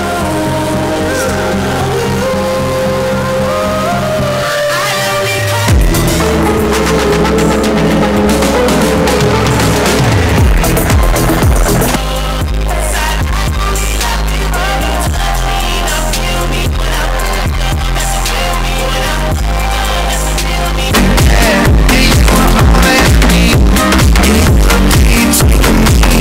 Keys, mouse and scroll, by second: 11.9 Page_Down.